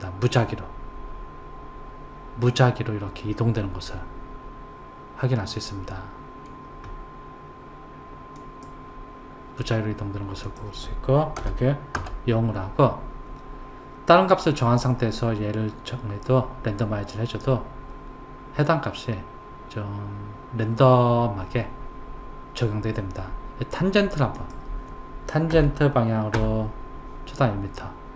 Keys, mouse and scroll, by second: 3.4-6.4 middle drag, 8.4 click, 10.5 click, 24.4 click.